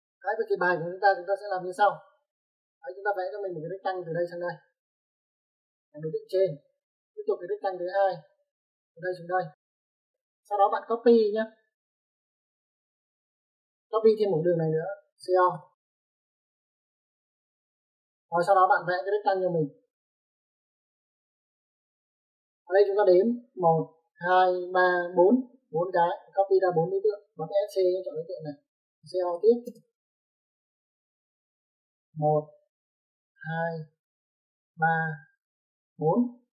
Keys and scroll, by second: 10.3 space, 11.9 space, 13.0 Escape, 15.2-15.5 typing, 18.1 space, 22.3 space, 25.7 space, 26.7 Escape, 26.7 `, 26.9 Escape, 27.0 Escape, 29.1 c, 29.4 o, 29.7 space.